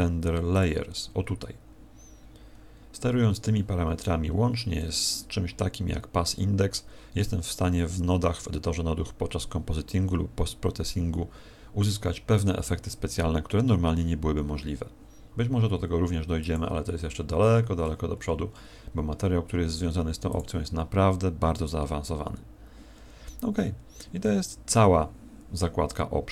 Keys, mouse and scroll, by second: 0.5 click, 1.2-3.7 scroll down 16, 16.4 click, 17.4-19.7 scroll up 18, 20.2 click, 23.0-24.6 scroll down 6.